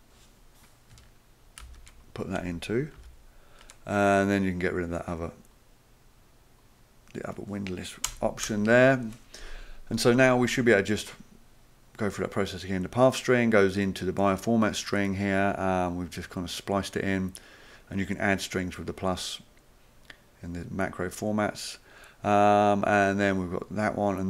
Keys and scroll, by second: 1.6 ctrl+c, 3.0 ctrl+v, 8.1 BackSpace, 8.5 BackSpace.